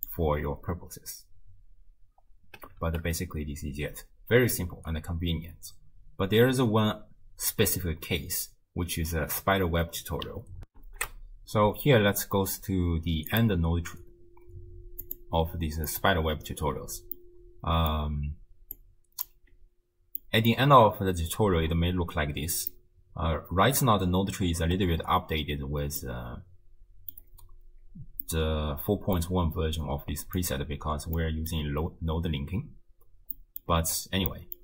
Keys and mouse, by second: 0.4 space, 2.5 space, 10.8 ctrl+alt+shift+q, 13.3 click, 15.0 click, 17.3 middle click, 18.8 click, 20.2 middle click, 22.7-23.9 middle drag, 26.1-27.2 middle drag, 28.3 click, 28.3 right click, 28.6 click, 28.6 right click, 30.4 click, 31.2 click, 31.2 right click, 33.4 click, 33.4 right click, 34.3 click.